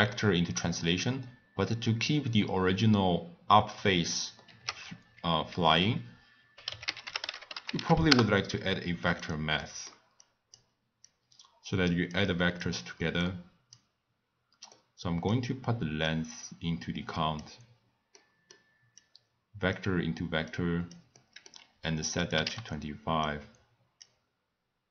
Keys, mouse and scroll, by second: 4.4 ctrl+a, 9.6 middle click, 10.2 click, 11.0 click, 13.2 click, 14.7-16.1 middle drag, 16.1 click, 18.1 middle click, 19.0 click, 20.5 click, 21.1-22.2 middle drag, 22.2 click, 23.2-24.9 drag.